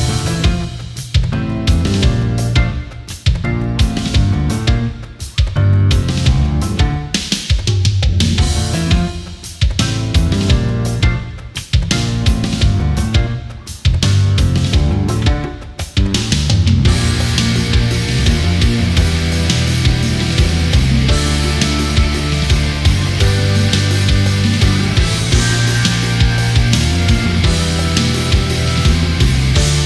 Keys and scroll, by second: 1.6 space, 5.4 space, 6.1 ctrl+-, 6.4 space, 10.7 space, 11.7 ctrl+-, 12.0 space, 18.2 ctrl+=, 20.4 ctrl+=, 22.3 ctrl+-, 24.8 space, 27.7 space, 29.6 ctrl+z.